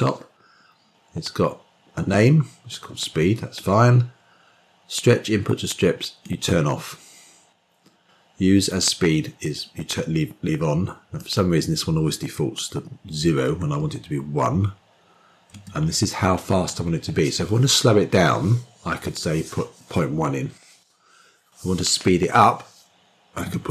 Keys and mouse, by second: 6.1 click, 11.1-23.7 drag.